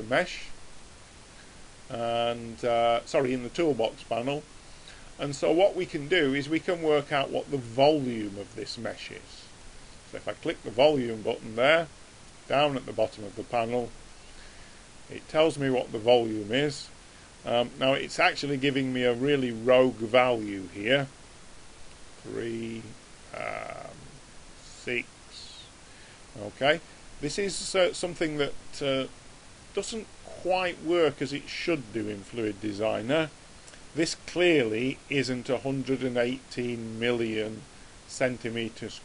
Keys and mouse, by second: 2.3 click, 9.7 click, 12.7 click.